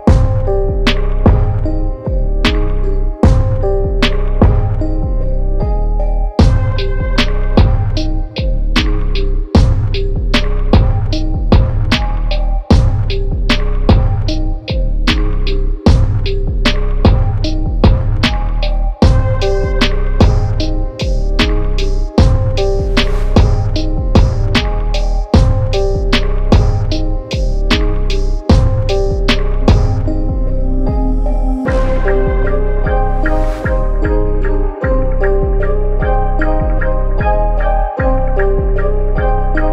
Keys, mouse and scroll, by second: 2.8 ctrl+alt+click, 3.9 ctrl+t, 4.5 right click, 6.0 click, 8.0 KP_Enter, 10.8 right click, 12.0 click, 13.9 ctrl+t, 14.4 right click, 15.3 click, 17.3 Return, 18.7 click, 19.1 right click, 20.7 click, 25.6 click, 28.9 ctrl+0, 30.4 click, 33.9 click.